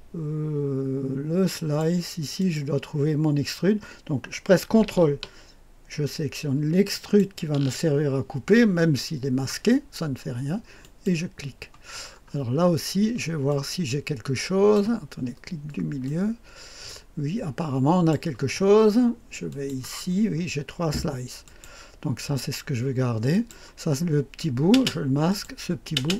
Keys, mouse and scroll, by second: 1.5 click, 2.3 click, 6.9 ctrl+click, 10.7 click, 11.5 click, 12.0-13.4 scroll up 1, 13.4-14.7 drag, 16.0-18.0 drag, 19.4 click, 20.0-21.3 scroll down 2, 21.3 click, 21.8 click, 23.2 click, 24.6 space, 25.2 click, 25.9 space.